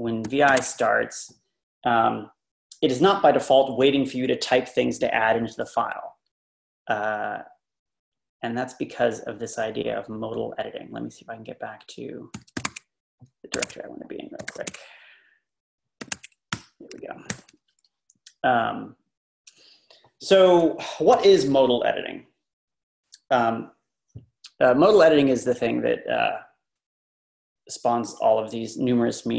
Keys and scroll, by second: 0.0-0.5 typing, 1.8 typing, 12.2-14.9 typing, 16.0-16.5 typing, 17.4 ctrl+l, 21.2 Right.